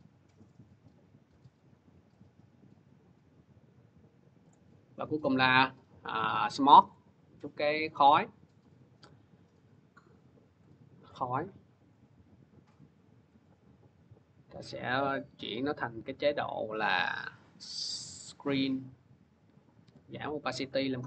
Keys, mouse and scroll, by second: 1.6-3.7 drag, 4.3 click, 5.0 click, 5.1 click, 6.7 click, 10.4 click, 13.0 click, 16.5 F4, 17.2 click, 18.1 click, 19.7 t.